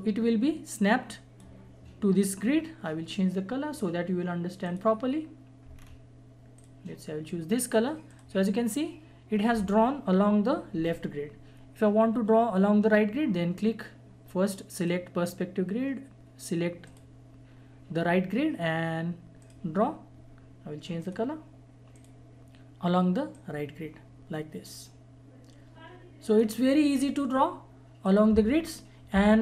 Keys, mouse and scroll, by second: 5.7-6.0 scroll up 1, 6.5 click, 14.7 click, 19.4-28.0 drag, 29.1 Delete.